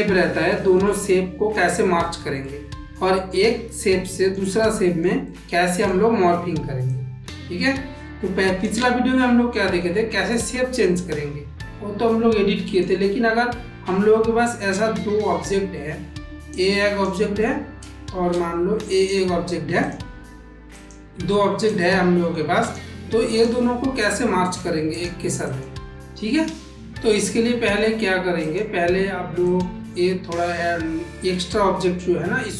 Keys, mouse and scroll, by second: 0.4 shift+middle click, 1.0 middle click, 2.3 middle click, 3.6 middle click, 4.4-4.9 shift+middle drag, 5.1-5.7 middle drag, 6.9-8.5 drag, 10.1-12.7 middle drag, 16.4 click, 17.9 shift+d, 19.7 click, 20.7 click, 21.5-22.6 drag, 23.2 click, 23.9 middle click, 28.3-29.5 drag.